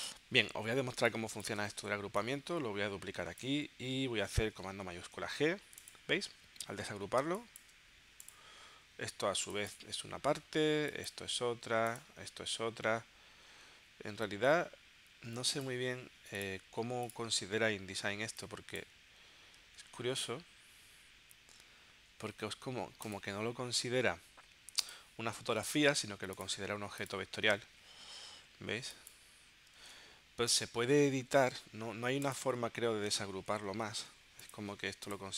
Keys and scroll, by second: 1.0 space, 5.1 shift+super+g, 7.3 space, 19.8 super+z, 30.3 super+z, 33.5 shift+super+g.